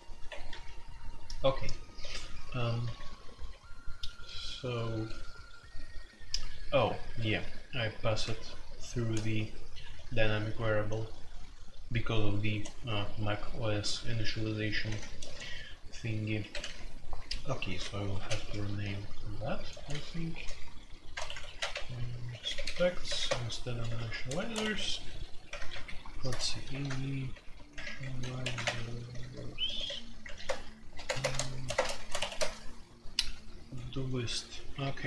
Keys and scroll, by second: 0.2 Escape, 0.4 F2, 2.0-4.9 typing, 6.5-8.7 typing, 10.1 typing, 14.8-19.7 typing, 21.0 shift+Insert, 21.1-35.0 typing, 28.6 Return.